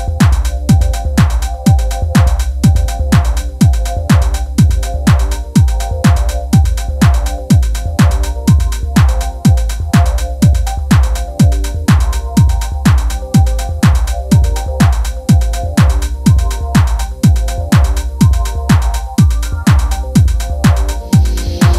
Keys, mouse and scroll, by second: 0.0 shift+click, 0.4 shift+click, 0.5 middle click, 0.6 shift+click, 0.8 shift+middle click, 1.2 ctrl+e, 1.6 middle click, 1.8 scroll down 3, 1.8 shift+middle click, 2.3 Tab, 2.4 middle click, 2.5 a, 2.8 l, 3.2 shift+middle click, 3.3 scroll up 2, 3.4 click, 3.9 shift+middle click, 4.3 shift+click, 4.4 shift+click, 4.8 ctrl+e, 5.2 shift+middle click, 5.4 scroll up 2, 5.6 shift+click, 6.2 middle click, 6.5 shift+click, 6.6 ctrl+e, 7.0 middle click, 7.2 scroll down 2, 7.3 shift+middle click, 7.9 ctrl+e, 8.2 click, 8.3 ctrl+e, 8.5 scroll down 1, 8.6 shift+middle click, 8.7 click, 8.8 middle click, 8.9 scroll up 1, 9.1 shift+middle click, 9.4 shift+click, 9.6 shift+click, 9.9 ctrl+z, 9.9 shift+click, 10.1 shift+middle click, 10.4 shift+click, 10.5 shift+click, 10.6 shift+middle click, 10.6 scroll up 2, 11.2 alt+shift+click, 11.8 alt+shift+click, 11.9 scroll down 2, 11.9 shift+middle click, 12.3 scroll up 2, 12.4 alt+shift+click, 12.6 alt+shift+click, 12.8 alt+shift+click, 12.9 shift+middle click, 13.0 scroll up 1, 13.1 ctrl+e, 13.5 middle click, 13.8 shift+middle click, 14.1 shift+click, 14.3 shift+click, 14.4 ctrl+e, 14.7 click, 14.9 shift+click, 15.0 ctrl+e, 15.3 shift+middle click, 16.0 scroll down 2, 16.3 scroll up 1, 16.4 shift+middle click, 16.6 click, 16.7 ctrl+e, 17.2 scroll down 1, 17.2 middle click, 17.5 a, 17.6 click, 17.7 ctrl+e, 17.9-19.2 shift+middle drag, 19.2 scroll up 2, 19.3 middle click, 19.8 Tab, 20.0 click.